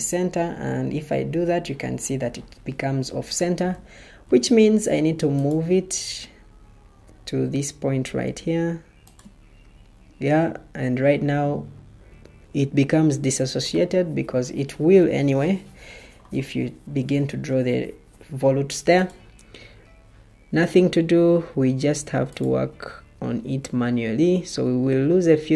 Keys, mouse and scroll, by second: 4.2 ctrl+d.